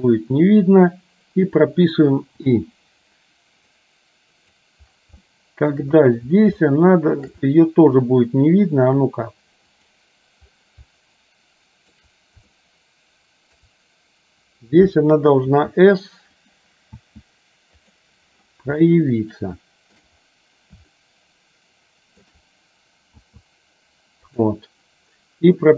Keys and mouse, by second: 4.0 click, 5.3 shift+middle click, 6.7 shift+middle click, 10.0 click, 11.1 shift+middle click, 12.6-13.7 shift+middle drag, 15.6 s, 17.1 s, 19.0-20.1 shift+middle drag, 21.1-22.3 shift+middle drag, 23.2 s.